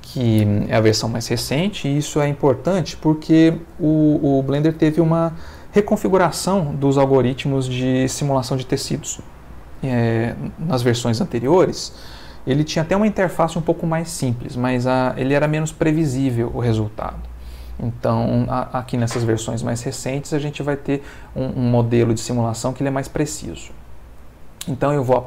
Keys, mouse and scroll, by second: 19.6-20.9 middle drag, 22.2 ctrl+middle click, 23.6 x, 24.2 click.